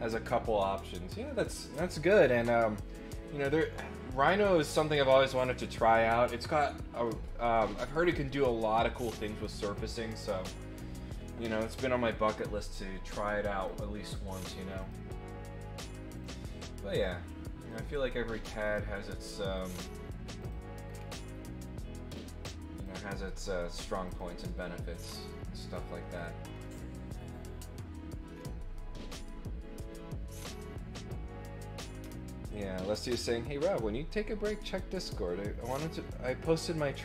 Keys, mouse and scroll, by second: 13.6 click, 14.0 click, 14.8 click, 16.1 click, 17.6 click, 18.6 click, 19.5 click, 20.4 click, 20.8 scroll down 1, 22.1 click, 24.0 click, 25.7 scroll down 1, 26.1-26.5 scroll up 2, 26.6 middle click, 28.3 middle click.